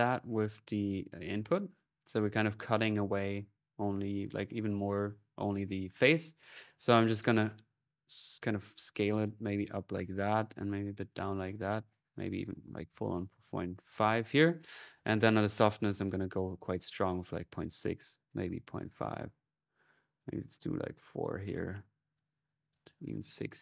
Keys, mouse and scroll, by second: 0.2-1.2 scroll up 1, 1.3 click, 1.6-2.4 scroll up 1, 2.9 scroll up 1, 3.1 click, 6.2-11.2 drag, 11.5 click, 14.5 click, 17.4 click, 19.5 click, 22.0-23.0 drag.